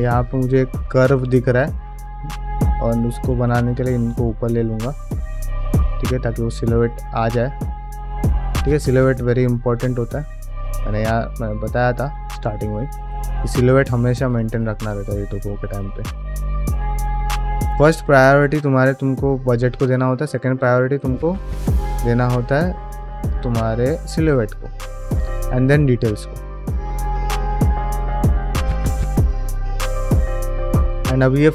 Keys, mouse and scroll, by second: 1.1 middle click, 1.9 click, 2.3 ctrl+click, 2.6 middle click, 3.0 g, 4.9-7.7 middle drag, 8.1 click, 8.3 g, 9.2 middle click, 9.8 middle click, 10.3 click, 10.5 g, 11.4 ctrl+middle click, 11.6 middle click, 11.9 click, 12.3 ctrl+click, 12.5 middle click, 12.8 g, 14.2 click, 14.4 middle click, 14.7 g, 15.3 middle click, 16.0 click, 16.1 g, 16.7 ctrl+middle click, 16.8 middle click, 17.0 g, 17.7 ctrl+middle click, 18.0 middle click, 18.3 shift+middle click, 19.1 middle click, 19.4 ctrl+middle click, 20.2 click, 20.4 g, 21.0 ctrl+shift+middle click, 21.5 middle click, 21.9 middle click, 22.4 click, 22.6 g, 23.5 ctrl+middle click, 23.8 ctrl+middle click, 24.2 click, 24.4 g, 25.0 shift+middle click, 25.4 middle click, 25.9 middle click, 26.7 click, 26.9 g, 27.6 middle click, 28.0-29.5 middle drag, 29.7 click, 30.0 g, 30.5 middle click, 30.8 click, 31.3 g.